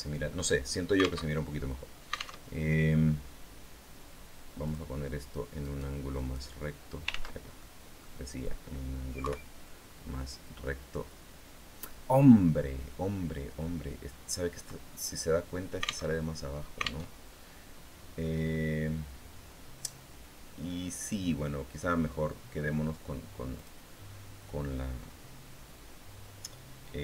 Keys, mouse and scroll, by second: 1.0 alt+Tab, 2.2 alt+Tab, 2.7 scroll down 2, 4.5 click, 5.4 right click, 5.9 click, 6.9 ctrl+z, 7.4 ctrl+click, 9.0 KP_3, 13.9-14.4 scroll down 2, 14.7 middle click, 15.9 alt+Tab, 16.9 alt+Tab, 17.9-18.5 scroll up 2, 23.3 click.